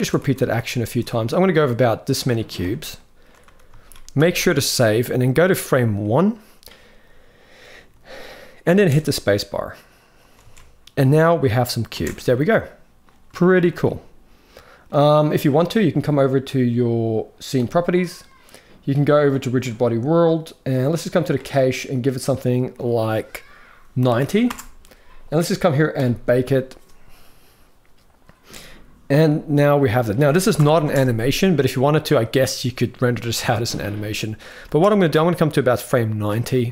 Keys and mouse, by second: 0.0-0.4 typing, 1.3-2.0 middle drag, 2.1 z, 2.8 middle click, 3.5 ctrl+s, 4.0 ctrl+s, 4.9 click, 6.0 click, 8.5 space, 10.2 alt+a, 11.6 space, 12.0-12.7 middle drag, 13.1 shift+middle drag, 13.6-14.6 middle drag, 19.1 click, 21.0 click, 22.2-24.2 drag, 25.7-28.8 drag, 29.5-29.8 middle drag, 30.3 shift+Left, 30.6 space, 34.3 space, 34.8-36.0 drag, 36.2 middle click.